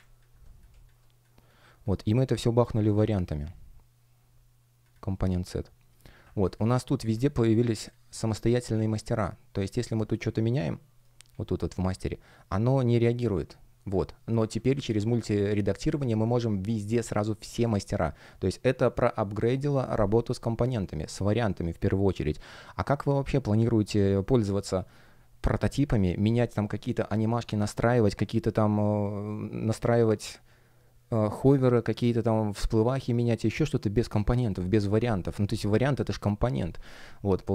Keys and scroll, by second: 10.8 shift+3, 14.3 super+z, 17.4 BackSpace.